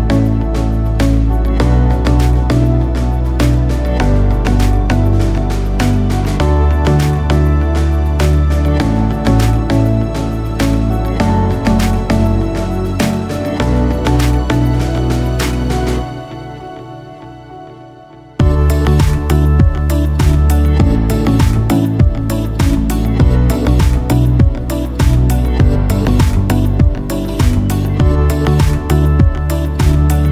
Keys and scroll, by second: 14.2 b, 15.6 [, 15.8 [, 16.0 [, 16.2 [.